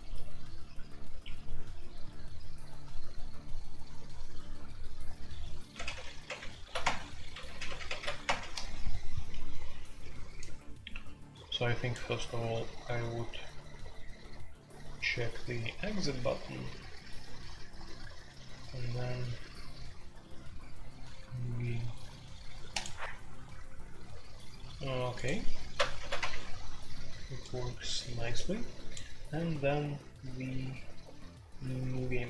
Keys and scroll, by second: 0.0-32.2 typing, 5.7 alt+p, 5.9 alt+p, 6.2 alt+p, 6.8 Return, 7.4 alt+p, 7.6 alt+p, 8.2 Return, 25.9 alt+p, 26.1 Return.